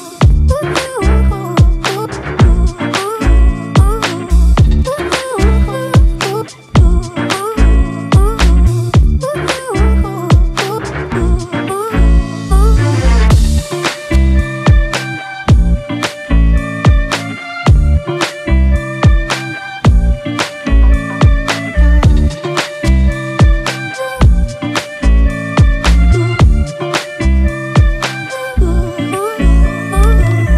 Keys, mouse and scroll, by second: 14.1 double click.